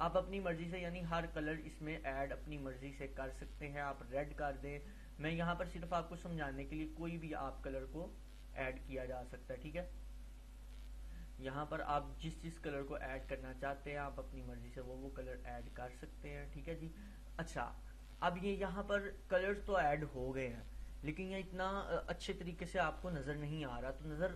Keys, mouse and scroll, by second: 6.3 click, 14.8-20.3 drag.